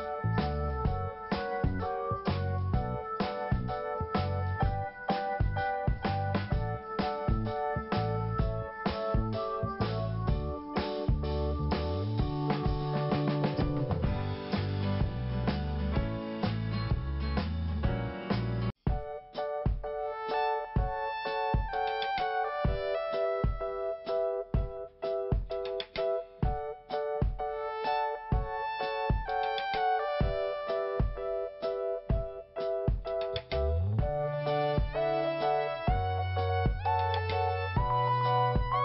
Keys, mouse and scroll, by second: 1.3 click, 1.6 scroll up 1, 3.3 click, 4.2 click, 7.1 scroll down 1, 8.7 click, 9.7 click, 12.3 scroll down 1, 13.9 p, 14.9 click, 16.7 scroll down 1, 17.8-18.6 scroll up 2, 18.4-19.1 typing, 20.8 scroll up 1, 21.4 scroll up 1, 22.8 click, 23.9 click, 29.2 scroll down 1, 29.7 scroll down 1, 30.2 scroll down 1, 30.8 scroll down 1, 31.5 click, 32.2 click, 33.5 scroll up 1, 34.3 click.